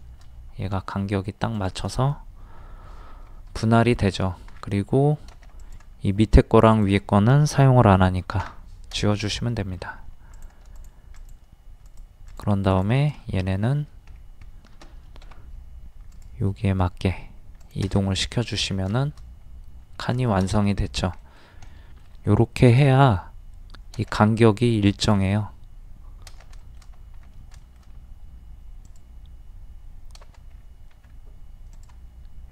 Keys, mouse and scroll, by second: 0.0 shift+middle click, 1.5 shift+click, 3.7 shift+middle click, 4.5 scroll down 1, 5.6 click, 6.7 shift+click, 8.4 Delete, 9.4 middle click, 10.0-10.3 scroll up 1, 10.3 click, 10.7 shift+click, 12.8 shift+click, 13.3 middle click, 13.8 scroll up 1, 15.2 typing, 16.2 click, 18.1 middle click, 18.3-18.6 scroll down 1, 19.0-20.2 shift+middle drag, 20.3 shift+middle click, 20.8 scroll up 1, 21.2 middle click, 22.7 click, 24.0 space, 25.0 click, 26.6 shift+middle click, 28.9 click, 30.6 scroll up 1, 30.9 typing, 31.8 click.